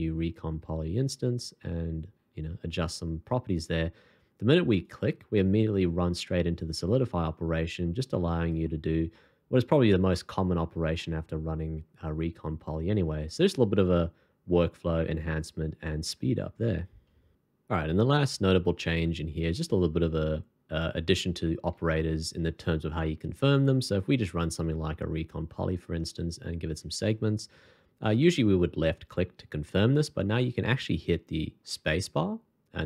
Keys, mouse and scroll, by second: 9.1 middle click, 10.4-10.7 scroll down 1, 11.0 middle click, 21.1 scroll up 1, 21.7 shift+2, 26.4-26.8 alt+scroll up 1, 31.6 space.